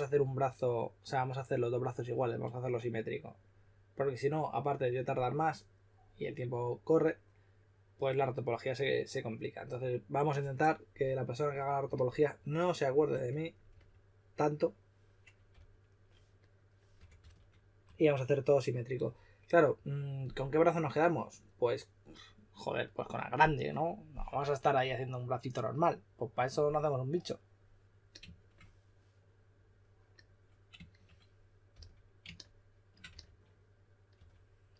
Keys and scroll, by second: 15.5 s, 16.7-17.8 typing, 31.7 s, 33.1-34.6 typing.